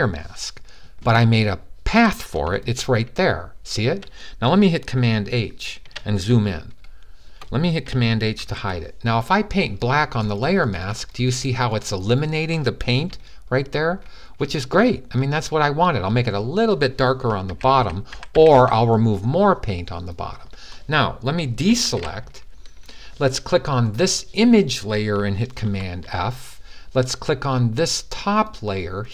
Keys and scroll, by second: 8.2 super+h, 17.2-18.3 typing, 21.5 super+d, 25.4 super+f.